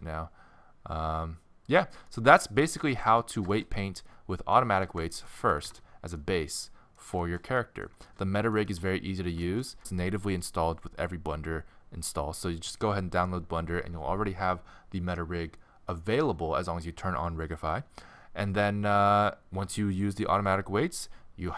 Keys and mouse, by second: 0.1 middle click, 0.3 middle click, 1.9-3.6 middle drag, 4.4 middle click, 4.9 ctrl+Tab, 5.4 z, 8.9 middle click, 9.1 middle click, 9.6-13.5 middle drag.